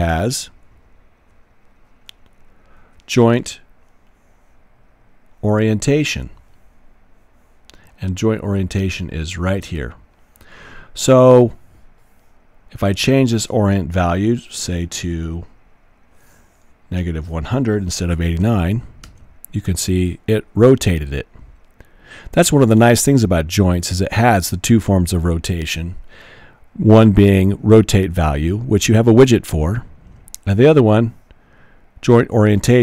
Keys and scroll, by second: 17.0 typing, 18.2 typing, 19.0 Return.